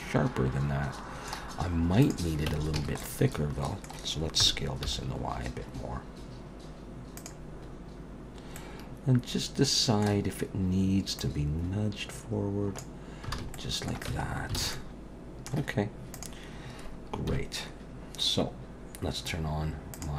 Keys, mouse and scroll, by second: 1.6-2.0 scroll up 1, 2.0 click, 2.5 Tab, 2.8 a, 3.0 middle click, 4.4 s, 7.6-8.5 scroll up 1, 8.5 middle click, 8.5-9.2 scroll up 1, 11.2 click, 13.3 alt+a, 13.5 middle click, 14.1 Tab, 14.3-14.6 scroll down 4, 14.6 alt+a, 14.7 middle click, 16.1 click, 17.3 KP_1, 19.9 click.